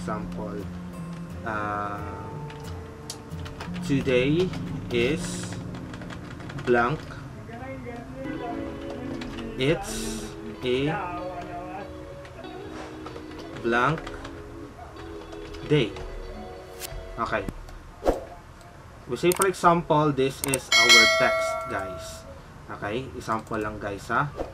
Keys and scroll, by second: 3.0-5.1 typing, 8.7-10.9 typing, 13.2 typing, 15.0-16.3 typing, 24.1 typing.